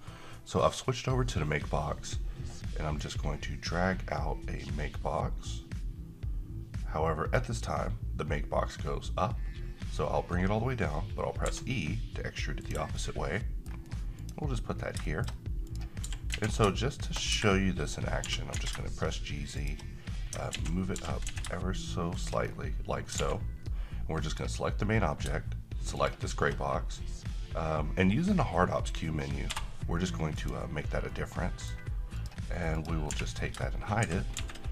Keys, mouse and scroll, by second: 3.0-7.4 drag, 11.4 e, 12.5 click, 13.0-13.9 middle click, 14.2 click, 14.8 scroll down 1, 15.0 shift+middle click, 15.3-15.7 scroll up 1, 15.7 click, 16.0 g, 16.3 z, 17.4 Escape, 18.2 g, 18.5 z, 19.6 shift+click, 20.1 scroll up 1, 20.5-21.3 typing, 22.1 shift+click, 22.5-23.0 scroll down 1, 23.1 alt+a, 24.2 click, 29.5 q, 30.4 click, 31.1-31.7 middle click, 32.2 click, 33.1 h, 34.0 shift+c, 34.3 shift+a.